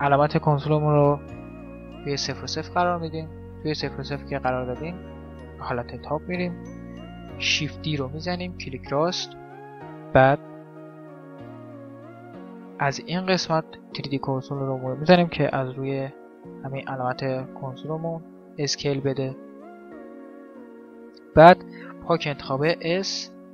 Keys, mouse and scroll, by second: 0.8 shift+s, 3.9-5.8 middle drag, 5.4 KP_7, 6.2-8.0 middle drag, 7.4 shift+d, 12.3-14.0 drag, 15.4 s, 17.2-19.0 drag, 17.6 s, 19.4 shift+s, 22.0 s.